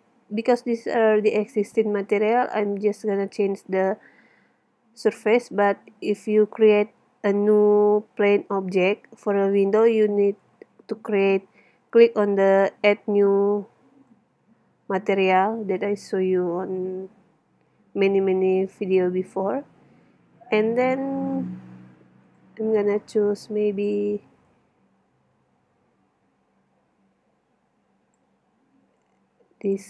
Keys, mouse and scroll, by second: 0.7 middle click, 3.8-6.0 middle drag, 10.4 click, 15.9 middle click, 17.5 middle click, 18.5-21.1 middle drag, 21.2 middle click, 22.2 click, 22.5-27.3 middle drag.